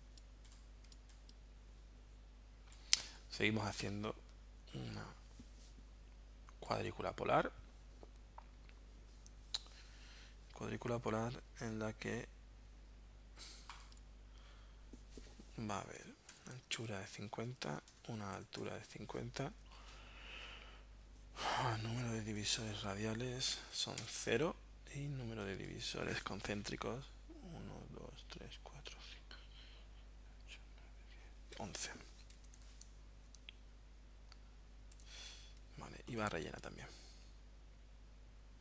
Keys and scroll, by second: 0.9 space, 16.0-18.6 typing, 16.7 Tab, 18.7 Tab, 24.1 0, 24.3 Tab, 32.4 1, 35.0 Tab.